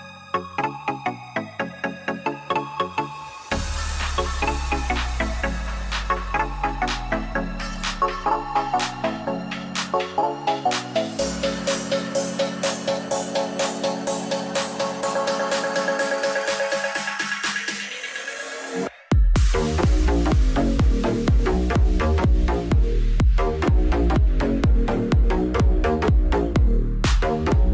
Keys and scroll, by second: 24.7-25.7 typing.